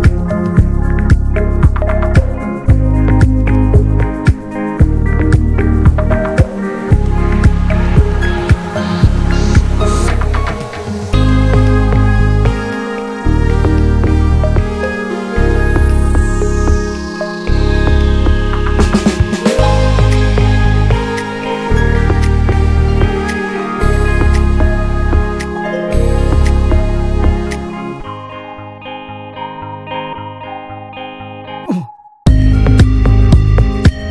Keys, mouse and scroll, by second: 0.0 ctrl+b, 3.0-3.8 scroll down 1, 3.8-4.1 middle drag, 4.1 drag, 4.4-5.2 middle drag, 5.2 scroll up 1, 5.4-5.8 middle drag, 5.8 click, 6.1 Tab, 6.6 click, 6.9 ;, 7.3 l, 7.9 shift+h, 8.2 middle drag, 8.4-9.0 scroll up 1, 9.0 ctrl+s, 9.2 click, 9.6 alt+shift+click, 9.8 alt+shift+click, 10.5 alt+shift+drag, 10.9 alt+shift+click, 11.2 alt+shift+click, 11.6 alt+shift+click, 11.8 shift+middle click, 12.6 alt+shift+click, 13.1 alt+shift+click, 13.3 middle click, 13.6-14.4 scroll up 2, 13.9 shift+middle click, 14.4 alt+shift+click, 14.8 alt+shift+click, 15.0-16.2 middle drag, 16.2-17.1 scroll up 2, 16.4 shift+middle click, 17.1 alt+shift+click, 17.4 alt+shift+click, 17.7 alt+shift+click, 18.0 scroll down 2, 18.2 shift+middle click, 18.9-19.4 scroll up 2, 19.4 alt+shift+click, 19.7 shift+middle click, 19.8-20.1 scroll up 1, 20.1-20.8 shift+middle drag, 20.8 ctrl+b, 21.9-23.2 scroll down 1, 23.2 middle click, 23.4 drag, 23.6-24.5 middle drag, 24.5 scroll down 2, 24.7 shift+middle click, 25.1 ctrl+s, 25.9-26.5 scroll down 2, 26.1 middle click, 26.5-27.5 shift+middle drag, 27.5 click, 28.0 ctrl+a, 28.5 `, 28.8 middle drag, 29.1 click, 29.3-31.9 shift+middle drag, 31.9 ctrl+s, 32.3-33.0 scroll up 2, 32.5 shift+middle click, 33.0 ctrl+s, 33.3 middle click, 33.4 scroll up 1, 33.6-34.1 shift+middle drag.